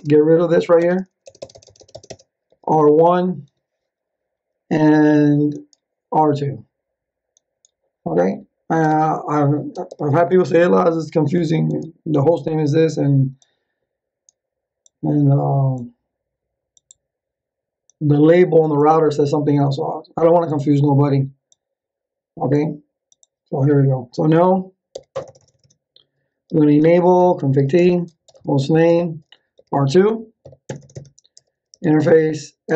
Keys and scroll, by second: 2.4 r, 3.4 1, 8.8 BackSpace, 9.8 r, 10.5 2, 24.9 n, 25.1 Return, 26.2-30.4 typing, 30.6 Return, 31.4-32.7 typing.